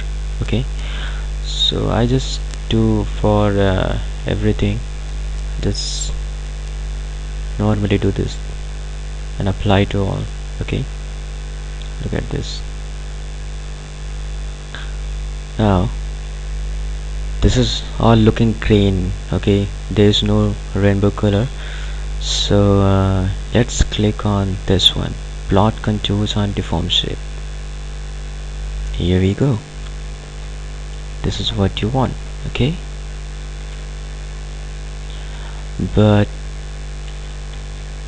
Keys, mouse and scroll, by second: 1.7 click, 4.3 click, 10.9 click, 19.6 click, 22.7 click, 27.4 click, 30.0-34.2 ctrl+alt+drag, 34.2-34.6 scroll up 1, 35.3-37.3 ctrl+alt+drag.